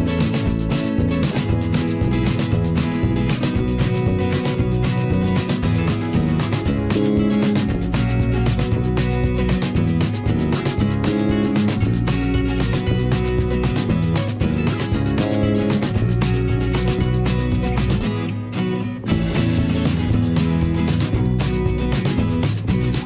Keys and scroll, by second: 1.3 alt+Down, 1.5 Up, 2.3 m, 2.3 a, 2.6 ctrl+g, 3.0 ctrl+shift+[, 6.8 ctrl+a, 7.0 5, 7.1 Return, 9.5 a, 10.5 shift+Up, 10.7 v, 12.6 v, 17.1 v, 19.4 p, 21.6 v, 21.8 /.